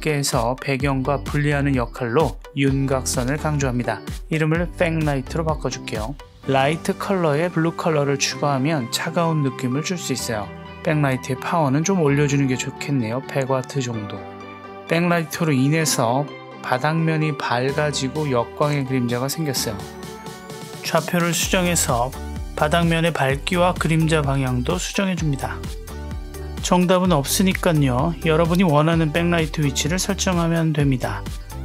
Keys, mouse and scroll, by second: 4.3-5.7 drag, 6.8 click, 7.2 click, 11.7-14.0 drag, 13.2 KP_0, 19.0 click, 19.8 click, 20.5 click, 21.0 click, 22.0 click, 22.7 click, 25.2 g, 27.4-29.9 right drag, 30.1 click, 31.0 click.